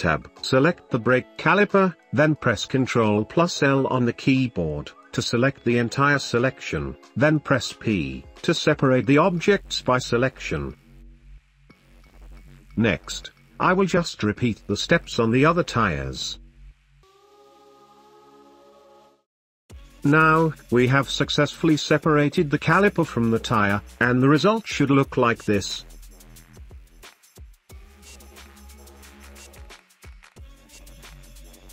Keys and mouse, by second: 0.6 shift+middle drag, 1.4 click, 3.6 ctrl+l, 5.3 p, 9.0 Tab, 10.0 g, 10.1 click, 10.4 g, 11.2 click, 11.5 g, 12.7 shift+middle click, 13.0 g, 13.2 Tab, 13.4 click, 13.7 ctrl+l, 13.9 p, 14.0 Tab, 14.2 g, 14.3 click, 14.4 g, 14.7 Tab, 15.5 ctrl+l, 15.7 p, 16.1 Tab, 16.5 g, 16.8 g, 17.1 shift+middle click, 18.0 Tab, 18.4 ctrl+l, 18.6 p, 18.9 Tab, 19.0 middle click, 19.3 g, 19.4 middle click, 19.7 middle click, 20.5-20.9 shift+middle drag, 21.1 middle click, 21.5 middle click, 22.9 g, 24.4 middle click, 24.7 g, 25.1-25.7 middle drag, 26.1 g, 26.7 click, 26.9 g, 27.2 shift+middle click, 27.4 middle click, 27.7 shift+middle click, 27.9 middle click, 28.0 shift+middle click, 28.5 g, 28.8 click, 29.1 g, 29.6 middle click, 29.7 shift+middle click, 29.9 middle click, 30.1 g, 30.5 middle click, 30.7 g, 31.1 shift+middle click, 31.2 middle click, 31.4 shift+middle click, 31.6 middle click.